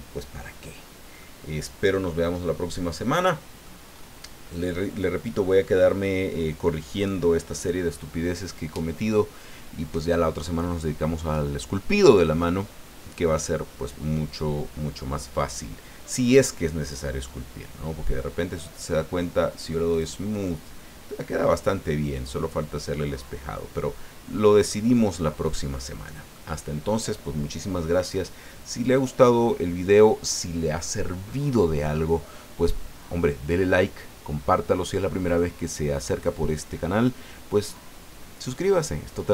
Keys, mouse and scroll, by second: 0.8 scroll down 2, 1.2 click, 1.2-3.8 middle drag, 3.9 scroll up 1, 16.2 click, 17.0 scroll down 1, 17.3-19.0 middle drag, 19.9 click, 20.4-24.8 middle drag, 25.1-26.5 middle drag.